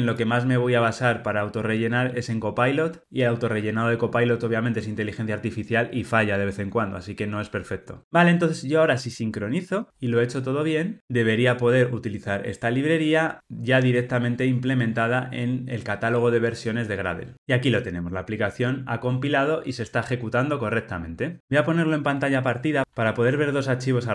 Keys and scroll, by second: 13.2 ctrl+r.